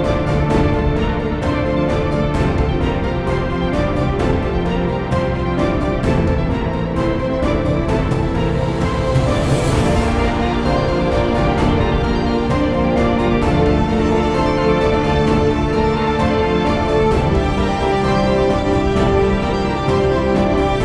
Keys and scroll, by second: 1.9-5.8 typing, 6.2 Return, 17.0-18.6 typing.